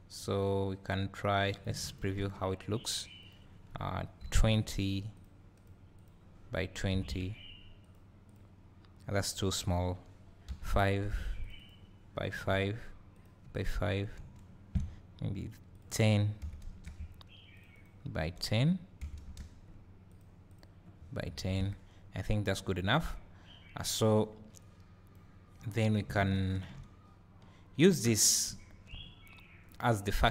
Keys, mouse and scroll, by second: 1.6 click, 1.9 ctrl+shift+click, 5.5 click, 5.9-8.0 drag, 8.3-9.4 drag, 9.7-12.5 drag, 13.5 click, 14.2 `, 14.4-22.5 middle drag, 17.5-20.2 drag, 20.5-22.5 drag, 23.0 click, 25.6 click, 26.3 ctrl+shift+click, 28.2 scroll down 2, 28.5 `.